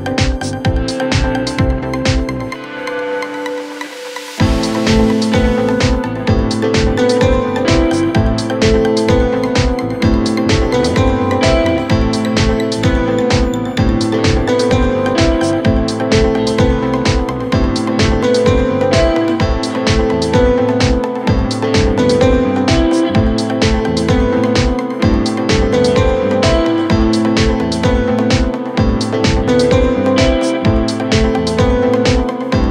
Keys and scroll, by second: 31.6 c.